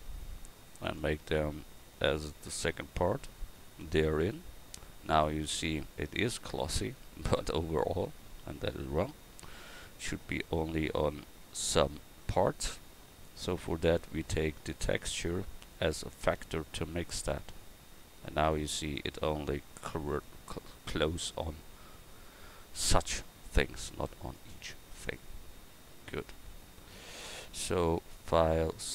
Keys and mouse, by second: 3.2-8.7 drag, 14.0-28.9 drag.